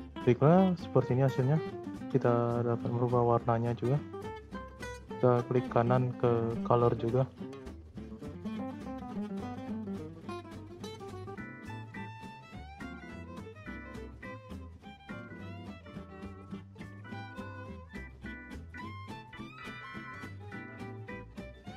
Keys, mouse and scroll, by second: 0.9 space, 2.5 space, 3.6-5.7 drag, 5.7-7.1 right drag, 7.1 click, 8.9 click, 10.5 click, 12.4 click, 15.2 click, 16.6 click, 17.1-18.3 drag, 18.3 space, 20.5 space, 21.3-21.7 drag.